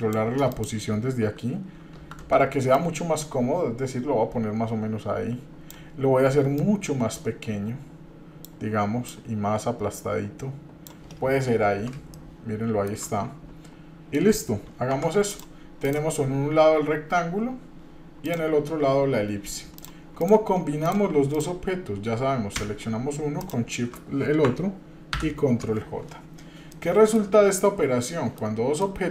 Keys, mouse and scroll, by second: 0.5-2.3 drag, 2.7-5.8 drag, 6.5-8.4 drag, 9.1-10.9 drag, 12.1 shift+middle click, 14.9 Tab, 15.3 drag, 15.8 drag, 18.3 click, 19.7 click, 20.2 click, 20.8 click, 21.3 click, 23.4 shift+drag, 25.2 ctrl+j, 26.7-27.2 middle drag, 27.6 shift+scroll up 2, 28.0 shift+middle click, 28.8 middle click.